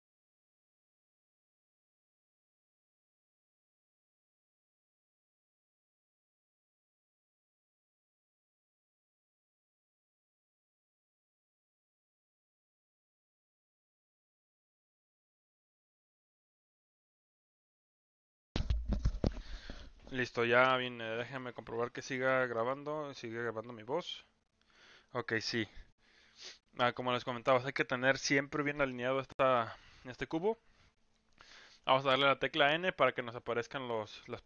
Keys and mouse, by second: 27.0-27.3 middle drag, 28.4-28.8 middle drag, 29.0 middle click, 30.0-30.4 middle drag, 32.0 n.